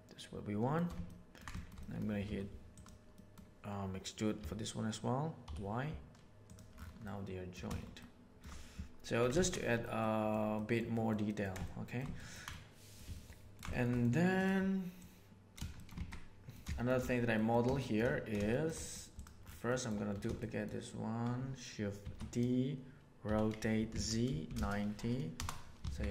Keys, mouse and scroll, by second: 1.0 ctrl+middle click, 1.5 shift+middle click, 1.7 middle click, 2.3 3, 3.1 middle click, 4.3 e, 7.1 middle click, 7.9 shift+middle click, 9.0 Tab, 9.4 alt+a, 9.5 middle drag, 9.9-10.3 ctrl+middle drag, 10.5 ctrl+middle drag, 10.9 ctrl+middle click, 11.2 ctrl+middle drag, 11.6-11.9 shift+middle drag, 12.1 ctrl+middle click, 12.5 middle click, 13.1-13.5 ctrl+middle drag, 13.7-14.1 shift+middle drag, 15.0 click, 15.7 shift+middle click, 16.6 shift+middle drag, 17.3 middle click, 17.7 shift+middle drag, 18.5 shift+middle click, 18.7 middle click, 19.6 middle click, 20.4 shift+middle click, 22.0 shift+d, 23.2 r, 25.7 alt+a.